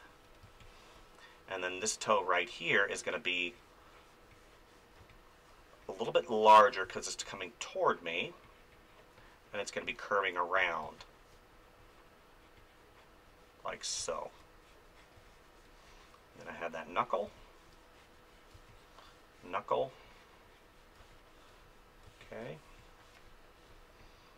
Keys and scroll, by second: 0.4 space, 5.0 space, 6.8 space, 10.8 space, 14.0 space, 17.2 space, 21.0 space.